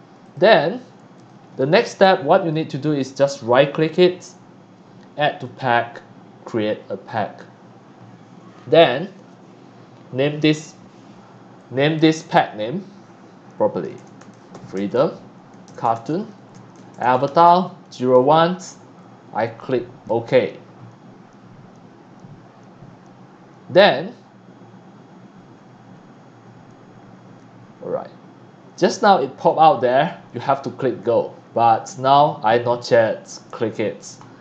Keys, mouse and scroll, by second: 0.2 click, 1.1 click, 1.9 click, 2.6 right click, 5.4 click, 7.0 click, 10.4 click, 11.5 click, 13.7-18.1 typing, 20.0 click.